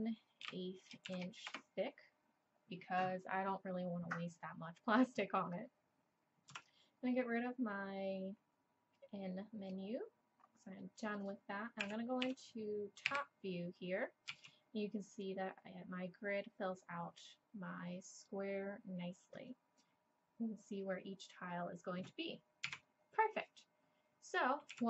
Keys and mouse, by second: 6.5 n, 9.9-10.8 drag, 11.8 KP_1, 12.2 KP_7, 13.1 KP_5, 14.3 z, 22.7 z, 24.7 z.